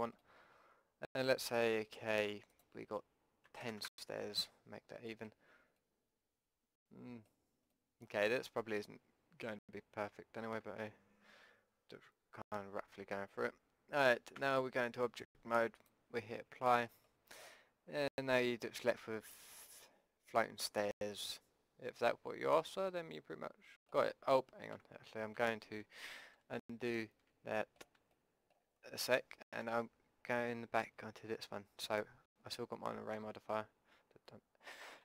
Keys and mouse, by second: 0.4-2.5 middle drag, 2.5-4.6 drag, 5.1-14.0 middle drag, 14.4 Tab, 15.8-18.0 drag, 19.5-21.1 middle drag, 21.8-23.0 drag, 24.8 Tab, 25.4 Tab, 26.5 ctrl+z, 26.9 ctrl+z, 27.6 click, 28.6 click, 28.9 click, 29.5 Tab, 30.8 a.